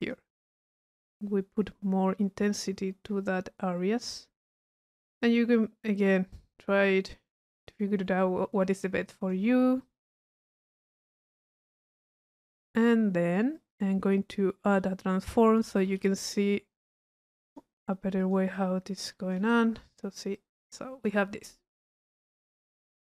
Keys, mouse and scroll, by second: 0.0 click, 9.1 click, 13.6 click, 14.7 right click, 15.2 click, 15.9 click, 17.5 click, 18.3 click, 19.1 click, 19.6 click, 20.1 click.